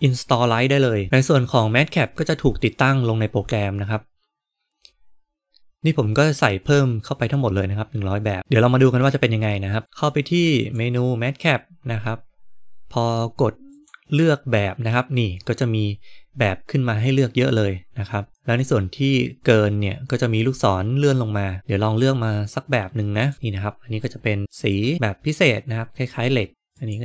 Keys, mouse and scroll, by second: 10.5-23.3 drag, 26.5-27.0 drag.